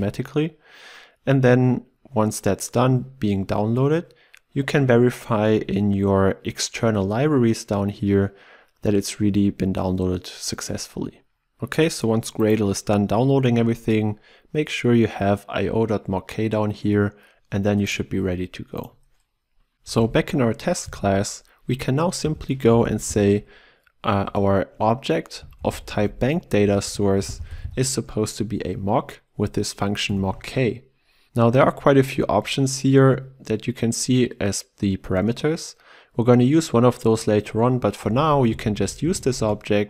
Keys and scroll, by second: 20.1 ctrl+e, 26.0 ctrl+w, 30.0 ctrl+w, 30.1 Return, 39.4 Return.